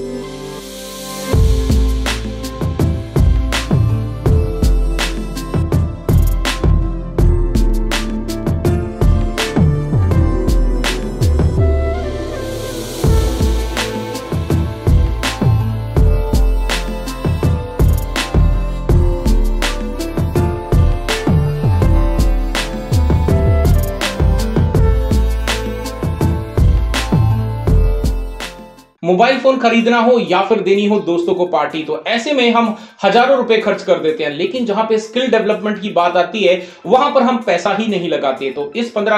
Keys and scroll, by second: 6.0 ctrl+shift+g, 7.3 ctrl+j, 16.8 Delete, 18.8 Delete.